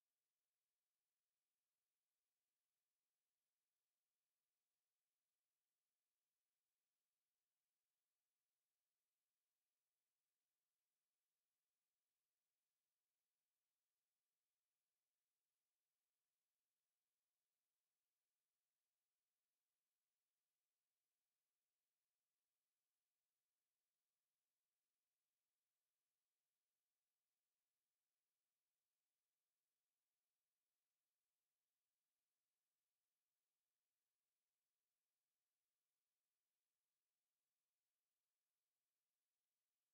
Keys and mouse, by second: 0.5 alt+middle click, 1.1 alt+click, 1.5 alt+middle click, 1.9 alt+click, 2.2 alt+right click, 2.6 right click, 3.7 click, 4.2 alt+click, 6.5 right click, 7.0 click, 8.0 right click, 9.7 alt+click, 10.8 w, 11.3 alt+click, 11.8 alt+right click, 12.3 alt+click, 12.7 right click, 13.9 alt+click, 15.1 click, 16.4 alt+click, 16.9 right click, 18.0 alt+click, 19.3 click, 19.7 alt+click, 20.3 right click, 20.9 click, 21.6 alt+click, 22.9 alt+h, 23.2 alt+click, 26.0 click, 27.9 alt+click, 29.6 click, 30.8 right click, 31.2 click, 31.4 right click, 32.6 click, 32.9 alt+click, 34.1 shift+click, 34.4 alt+click, 34.8 alt+right click, 35.6 alt+click, 36.5 alt+click, 37.5 alt+click, 38.4 alt+click, 38.6 click, 39.7 shift+right click.